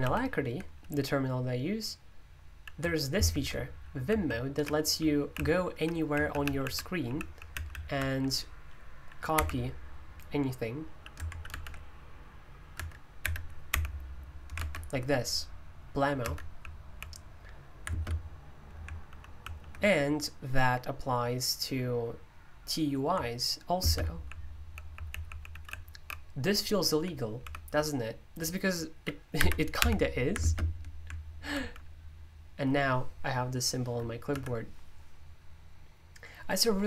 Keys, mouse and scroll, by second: 0.0 super+l, 3.2 alt+space, 4.1-7.9 typing, 9.3 typing, 12.7 Escape, 13.2-14.2 typing, 16.2 Escape, 16.3-17.1 typing, 17.9 alt+space, 18.8-19.5 typing, 23.8 alt+space, 24.3-25.8 typing, 26.9-27.6 typing, 29.3-29.7 typing, 30.4 alt+space, 32.0-32.7 typing, 34.3 Escape.